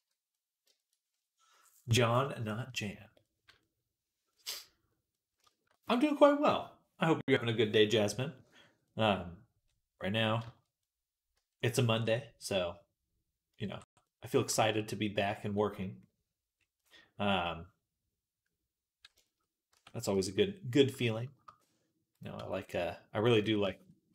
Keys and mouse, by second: 3.5-5.0 right drag, 5.0-10.7 middle drag, 10.7-13.9 right drag, 11.2 Tab, 13.5 Tab, 14.1-15.1 shift+right drag, 15.1 shift+middle click, 15.8-17.6 right drag, 17.7 right click, 17.9 right click, 19.1 shift+right click, 19.6 Tab, 19.9-22.2 shift+drag, 22.0-24.1 right drag, 22.2 Tab, 23.2 click.